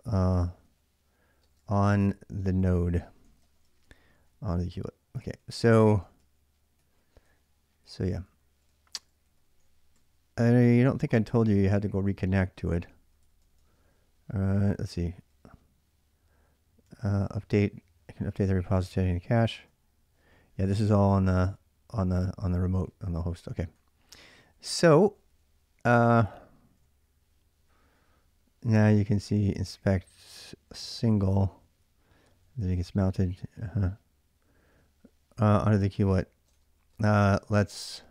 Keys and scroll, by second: 0.0-15.1 typing, 16.6 k, 16.9 k, 16.9 k, 17.0 k, 18.0-20.0 typing, 21.0-29.9 typing, 31.0-35.0 typing, 36.3-38.1 typing.